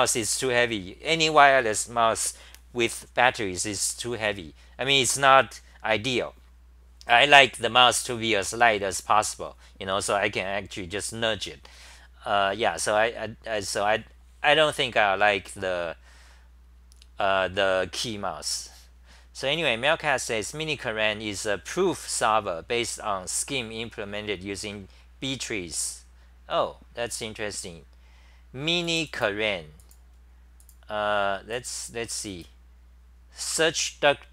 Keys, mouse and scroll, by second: 34.1-34.3 typing.